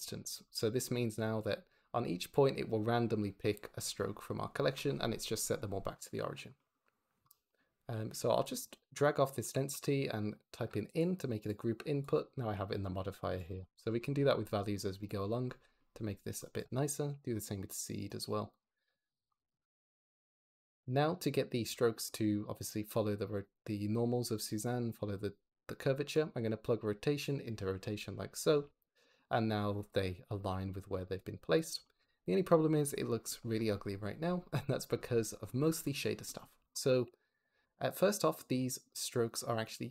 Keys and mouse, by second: 0.0 click, 11.3 click, 11.9 click, 13.4 click, 13.7 click, 16.3 click, 18.4 click, 19.2 click, 21.6 shift+middle drag, 26.0 click, 29.2 click, 29.8 click, 32.9 click, 35.7 click, 36.5 g, 36.8 x, 37.3 click, 37.5 g, 37.9 click, 38.6 shift+click.